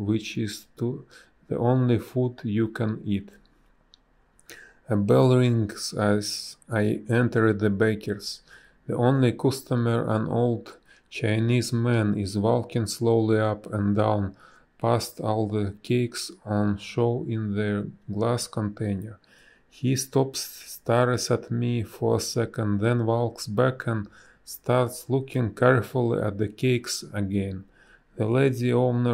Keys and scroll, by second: 1.2 space, 2.3 space, 2.9 b, 6.8 a, 8.9 space, 13.4 space, 21.0 space, 22.6 b, 23.4 space, 25.7 space, 28.3 space.